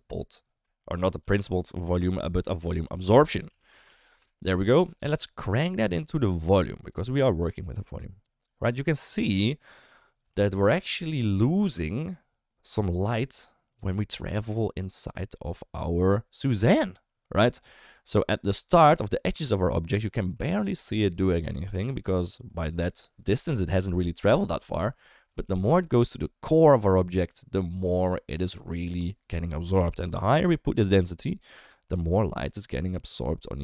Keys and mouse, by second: 1.1 ctrl+x, 2.4 shift+a, 6.0 click, 7.3 click, 8.6-10.2 middle drag, 10.5 shift+middle click, 10.8 middle click, 11.4 shift+middle drag, 28.1 shift+middle click, 30.4-33.6 drag.